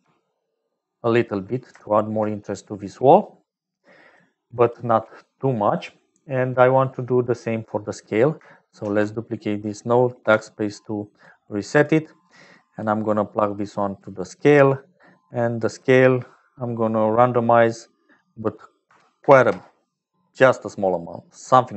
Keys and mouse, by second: 0.1 m, 4.2 click, 5.2 click, 8.8 shift+d, 10.5 BackSpace, 11.2 click, 12.4 click, 13.4-14.8 drag, 18.0-20.9 drag.